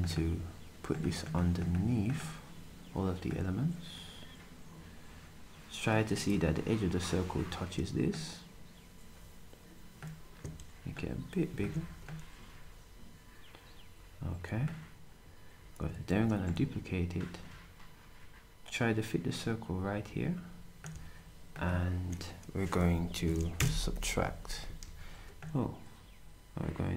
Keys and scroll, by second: 24.8 ctrl+shift+z.